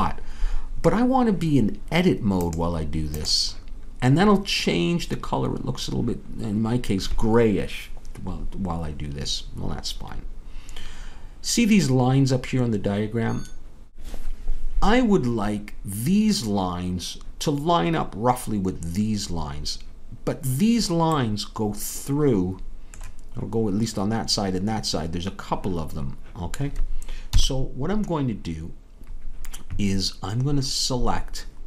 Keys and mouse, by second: 2.4-4.4 drag, 27.3 KP_3.